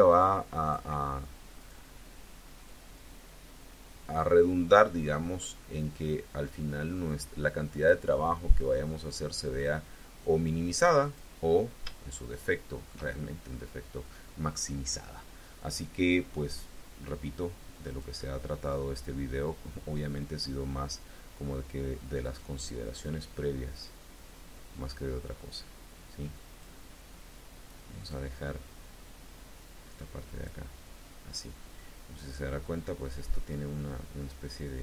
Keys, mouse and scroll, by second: 1.4 click, 2.5-7.9 drag, 8.0-8.4 scroll up 2, 9.3 click, 10.1-11.2 drag, 11.3 scroll up 1, 11.9 shift+middle click, 12.3 shift+click, 13.5 scroll up 2, 14.3 scroll up 2, 14.9 scroll up 2, 16.4 scroll down 2, 17.7 click, 18.5-21.0 drag, 22.1 click, 22.9-26.7 drag, 28.5-30.5 drag, 32.5 scroll up 1, 32.8 scroll down 2.